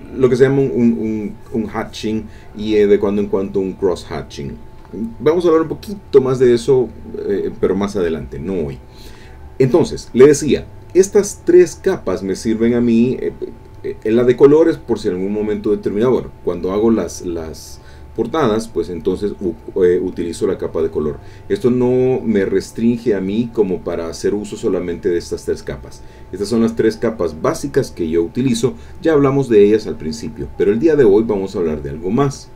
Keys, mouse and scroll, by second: 3.2-4.3 drag, 4.5 click, 14.3 click, 15.2 click, 22.5 click, 22.9 click, 23.2 click, 23.6 click, 23.9 click, 24.6 click, 24.9 click, 26.1 click, 26.4 click, 31.1 click, 32.0 middle click.